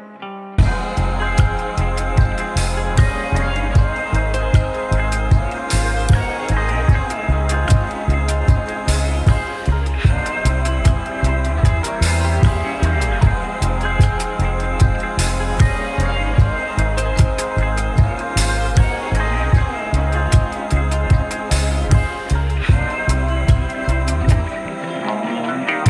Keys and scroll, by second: 0.3 ctrl+z, 1.5 F3, 1.8 1, 2.3 F4, 3.3 F4, 4.8-5.6 typing, 7.4 F3, 8.6 F3, 9.8 F3, 10.6 F3, 19.8 w, 20.1 F3, 21.1 F3.